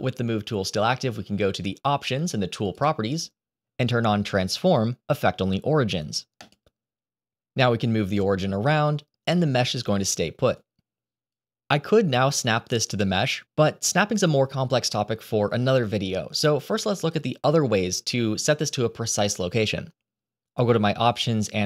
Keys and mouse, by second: 7.5-9.9 drag, 10.6 click, 12.2 click, 13.9 click, 20.9-21.6 drag.